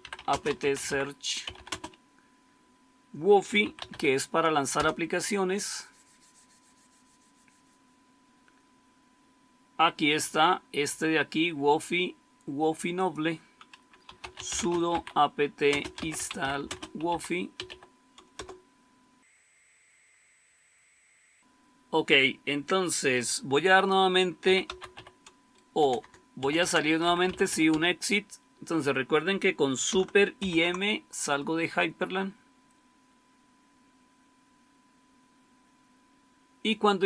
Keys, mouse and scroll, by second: 0.0-1.9 typing, 3.2-4.3 typing, 4.6 Return, 13.8-18.1 typing, 18.2 Return, 24.1-27.9 typing, 30.3 super+m.